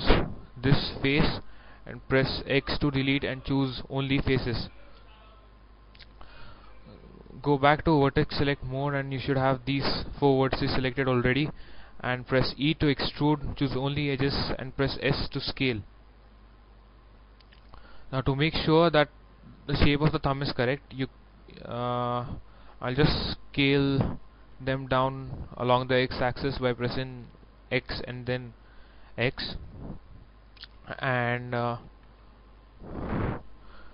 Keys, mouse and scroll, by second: 0.9 right click, 1.5-2.6 middle drag, 2.7 x, 3.9 click, 4.6-5.6 middle drag, 7.5 click, 8.1-10.6 middle drag, 12.8 e, 13.8 click, 15.2 s, 17.0 click, 17.6-20.1 middle drag, 23.7 s, 24.5 x, 29.4 click, 31.9 s, 32.2 x, 32.8 click.